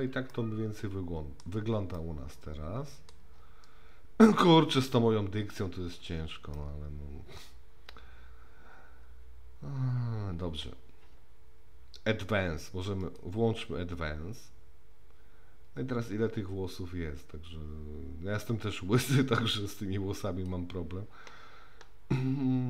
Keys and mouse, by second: 0.3-1.4 middle drag, 1.9-3.1 middle drag, 6.5-7.4 middle drag, 13.0 click, 15.8-20.5 drag.